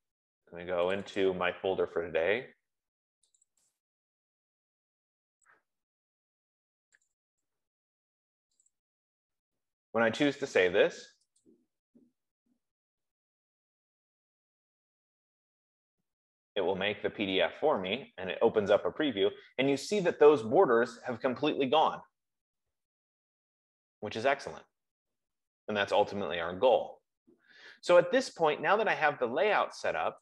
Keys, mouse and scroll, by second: 1.3 click, 1.7 click, 3.8 click, 4.0 click, 5.1 middle click, 6.2 middle click, 7.4 click, 7.7 click, 9.3 click, 10.1 scroll, 11.8 click, 14.4-16.8 drag.